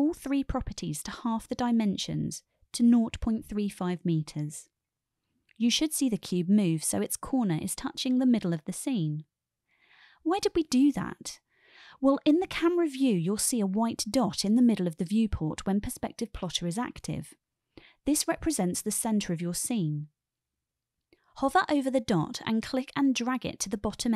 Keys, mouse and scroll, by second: 0.3-3.7 drag, 4.7-9.4 middle drag, 9.9 KP_0, 12.0 click, 12.7 click, 23.5-24.1 drag.